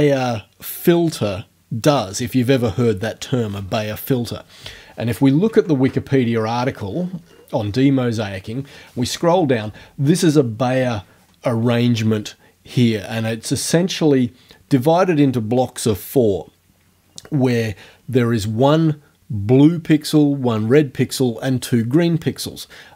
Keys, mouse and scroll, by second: 5.5 alt+Tab, 6.9-7.2 scroll down 2, 7.6 scroll down 2.